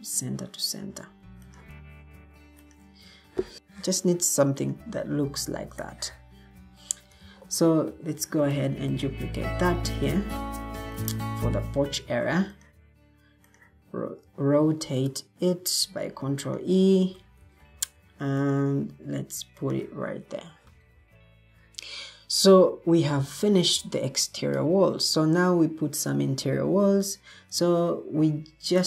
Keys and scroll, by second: 7.1 alt+g, 8.1 ctrl+d, 12.0 ctrl+e, 17.4 ctrl+d, 20.4 Escape.